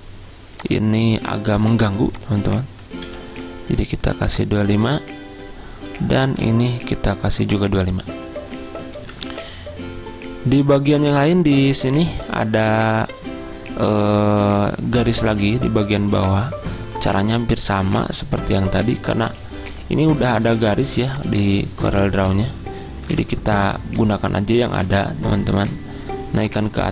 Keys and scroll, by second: 2.9 typing, 6.3 typing, 9.2 typing, 23.2 ctrl+Home.